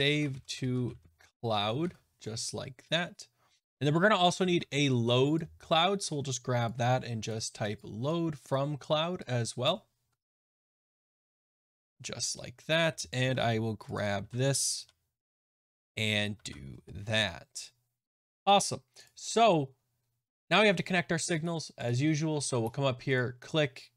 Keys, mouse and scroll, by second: 21.9 click, 23.1 click.